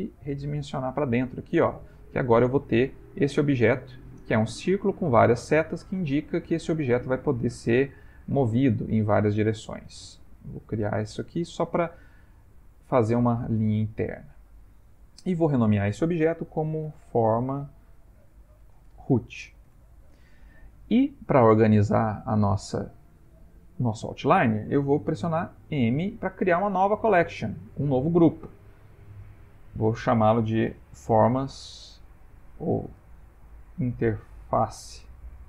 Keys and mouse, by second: 1.5 a, 2.0 middle click, 5.4 middle click, 6.7 middle click, 7.9 click, 8.8 shift+click, 9.8 f, 10.3 ctrl+middle click, 10.5 ctrl+middle click, 10.6 ctrl+middle click, 11.0 middle click, 11.9 middle click, 12.6 Tab, 13.0 middle click, 13.7 middle click, 15.3 F2, 19.3 o, 25.7 m, 32.4 BackSpace, 32.5 BackSpace, 32.8 BackSpace.